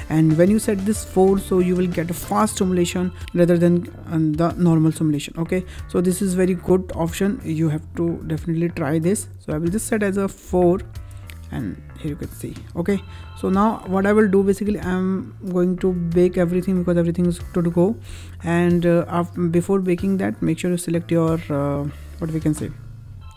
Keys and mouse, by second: 9.4-11.1 drag, 21.4-21.9 drag.